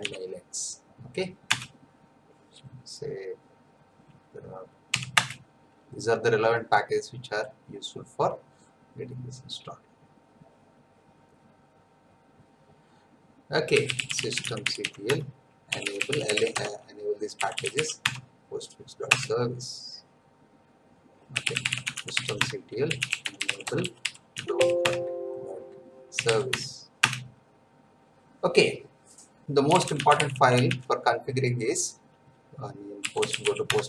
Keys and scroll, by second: 0.0-0.5 typing, 1.5 Return, 5.1 Return, 13.5-18.2 typing, 19.1 Return, 21.0-24.3 typing, 24.8 Tab, 25.9-26.8 typing, 27.0 Return, 29.4-31.1 typing, 32.7-33.8 typing.